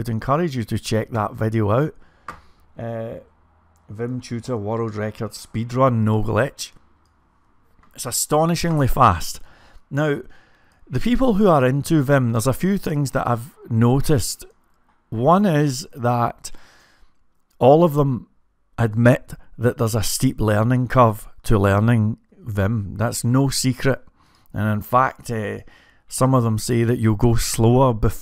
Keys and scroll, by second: 0.0-0.5 typing, 20.4 typing, 26.6 typing.